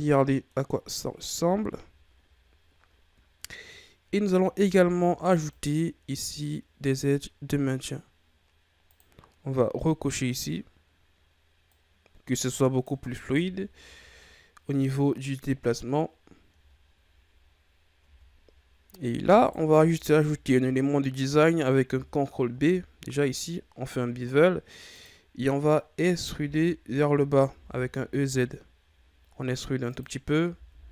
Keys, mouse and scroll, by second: 0.5-0.9 scroll down 1, 0.9 middle click, 1.4 Tab, 4.5 ctrl+r, 10.3 click, 11.6-13.2 drag, 13.2 Tab, 13.4-13.8 scroll down 4, 13.8-15.9 middle drag, 15.9-16.2 scroll up 3, 16.6 ctrl+scroll up 1, 17.9 Tab, 19.3 alt+right click, 20.4-22.5 middle drag, 22.5 ctrl+b, 26.3 e, 30.5 e.